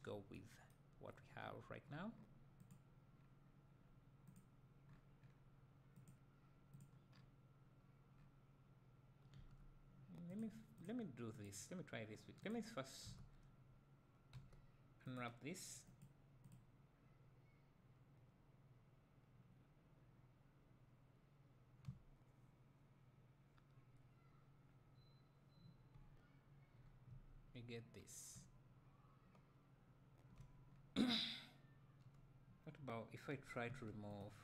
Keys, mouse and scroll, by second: 2.7 click, 9.4 Tab, 10.4 click, 12.5 click, 27.1 a, 28.4 `, 30.7-31.2 scroll up 1, 33.8 1.